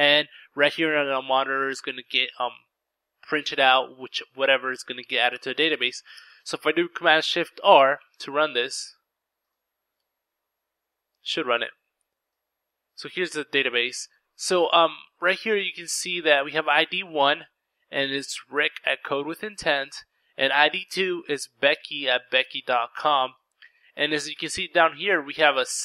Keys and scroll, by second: 6.5 ctrl+r.